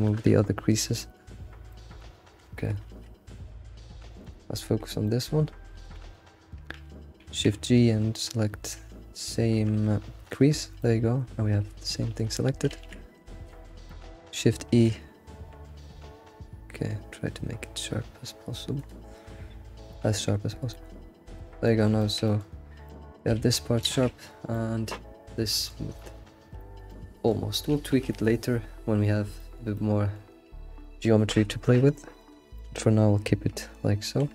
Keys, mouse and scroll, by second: 0.0 shift+e, 0.9 middle click, 1.3-1.7 scroll up 4, 1.7 middle click, 2.4 alt+shift+z, 2.8 alt+shift+z, 4.3 alt+Left, 4.8 scroll down 1, 5.0-5.8 middle drag, 5.0 alt+click, 5.9 click, 10.7 scroll down 2, 10.8-12.0 middle drag, 12.2-12.7 scroll up 2, 12.9 alt+z, 13.5 alt+shift+z, 13.8 shift+middle click, 14.7 shift+e, 20.0 click, 20.5 scroll down 2, 20.7-22.5 middle drag, 22.5-22.8 scroll up 3, 22.8-23.3 middle drag, 23.3 alt+shift+z, 23.6 middle click, 23.8 alt+shift+z, 24.3 scroll down 3, 24.5-27.4 middle drag, 27.4-27.7 scroll up 3, 28.3-34.1 middle drag, 34.1 shift+e.